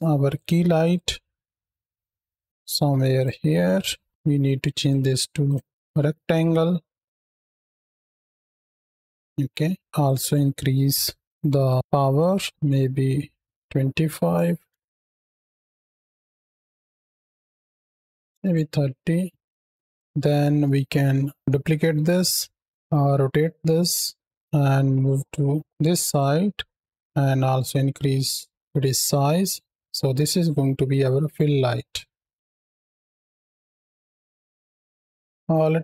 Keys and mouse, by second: 0.1 click, 0.9 g, 1.7 click, 3.0 click, 4.1 KP_7, 4.6-5.4 drag, 5.8-6.3 drag, 7.3 click, 8.3 click, 9.6 middle click, 9.9-11.7 drag, 12.0-13.5 drag, 14.8-15.5 shift+middle drag, 15.9 shift+middle click, 16.5 click, 17.5 click, 19.7 shift+middle click, 21.4 shift+d, 21.9 click, 22.7 KP_1, 22.7 KP_3, 22.8 r, 24.2 click, 24.6 g, 25.9 click, 26.8 middle click, 27.5 click, 28.6-29.9 middle drag, 30.6-31.0 middle drag, 32.0 shift+middle click, 32.6 click, 33.4 click, 34.5 shift+middle click, 35.4 click.